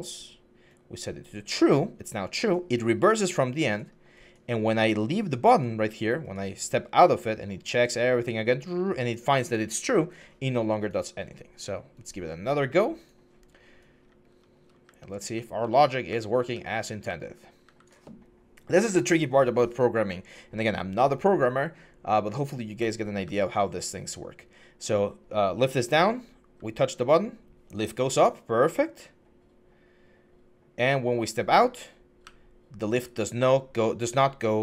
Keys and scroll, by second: 13.8-17.4 typing, 23.0-23.7 typing, 25.7-26.3 typing, 32.0-32.7 typing, 33.8-34.6 typing.